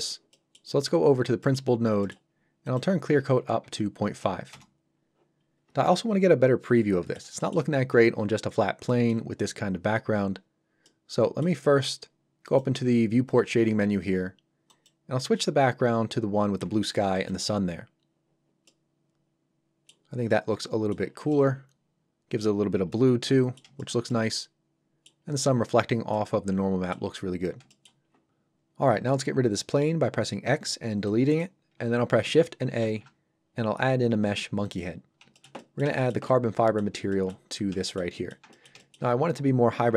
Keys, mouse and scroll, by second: 0.3 middle click, 0.8-1.4 scroll up 1, 1.4 middle click, 2.3-2.7 scroll up 1, 2.7 click, 3.6 KP_5, 4.5 Return, 5.4-5.9 scroll down 1, 5.9 middle click, 7.4 shift+middle click, 8.9 middle click, 12.4 click, 17.2 click, 18.7 middle click, 20.0 scroll up 1, 20.3 middle click, 21.1 scroll down 1, 21.3 middle click, 22.6 scroll up 1, 22.9 middle click, 23.8 shift+middle click, 24.1 scroll, 25.3-26.1 scroll up 1, 26.1 middle click, 27.1-27.6 scroll down 1, 27.7 shift+middle click, 28.0 scroll down 1, 31.1 click, 32.8 shift+a, 34.6 click, 35.0 scroll down 1, 35.3 shift+middle click, 35.6 middle click, 35.6 middle click, 36.0 shift+middle click, 36.3 middle click, 37.1 shift+middle click, 37.5 scroll up 1, 37.8 shift+middle click, 38.1 middle click, 38.2 middle click, 38.5 ctrl+middle click.